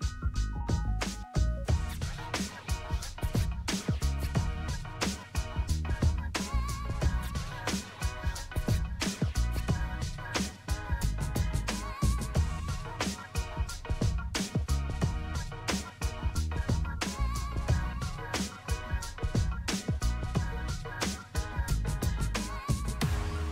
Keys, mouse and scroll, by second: 0.0 scroll down 1, 1.9-11.5 drag, 12.4 scroll up 1, 13.5-14.8 scroll down 1, 14.8-17.1 drag, 17.1 ctrl+z, 17.7-20.9 drag, 20.9 scroll up 1, 22.2 click, 22.7-23.5 scroll down 1.